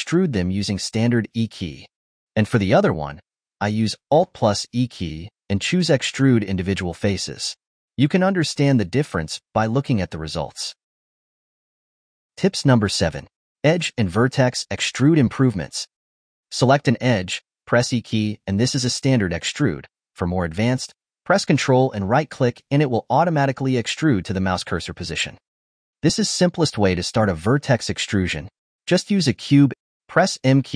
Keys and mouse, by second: 1.9 click, 2.9 shift+click, 3.3 shift+click, 3.8 shift+click, 4.8 alt+e, 9.2 click, 12.4 ctrl+middle click, 13.3 click, 18.2 e, 18.5 e, 18.9 e, 19.7 ctrl+z, 19.8 ctrl+z, 20.1 ctrl+z, 22.4 ctrl+right click, 23.8 ctrl+right click, 25.0 ctrl+right click, 25.2 click, 25.6 click, 26.6 Tab, 28.2 a, 30.4 m.